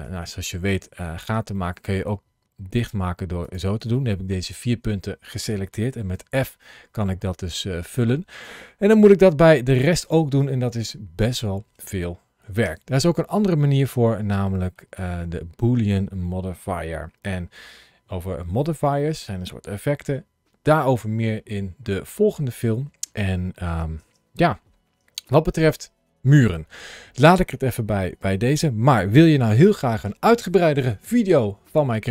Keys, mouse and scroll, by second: 0.0 middle click, 1.4 middle click, 2.6 shift+click, 3.3 shift+click, 3.8 middle click, 6.0 f, 7.1 f, 8.8 f, 8.9 middle click, 10.2 middle click, 11.0 scroll down 3, 12.5 Tab, 13.1 middle click, 15.2-17.2 scroll down 1, 23.2 Tab, 23.9 Tab, 24.3 middle click.